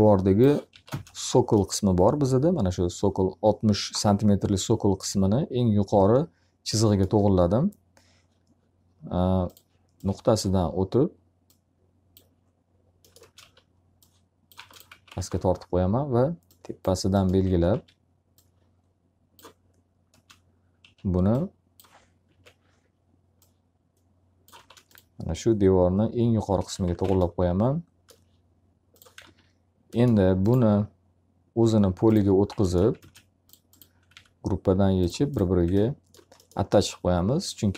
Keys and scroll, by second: 0.2 s, 0.8 space, 12.7 space, 13.3 s, 14.5 space, 14.8 z, 15.1 alt+a, 17.7 w, 20.1 space, 20.7 s, 22.2 ctrl+z, 24.5 space, 26.5 x, 26.9 z, 27.0 alt+a, 32.9 ctrl+space, 34.0 b, 37.6 F3.